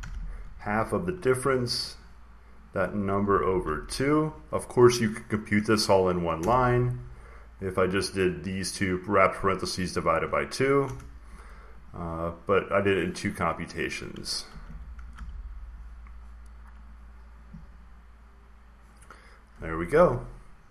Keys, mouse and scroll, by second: 0.0-1.3 typing, 2.5-4.6 drag, 2.9-3.7 typing, 6.3 Return, 7.5-9.7 drag, 10.7 Return, 11.7-12.8 drag, 12.9 click, 14.2-15.5 typing, 17.1 click, 17.2-18.8 drag.